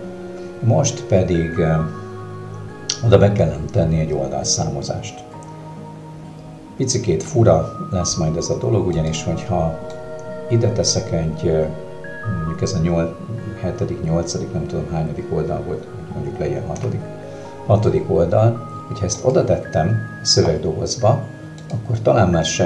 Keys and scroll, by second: 16.8 6.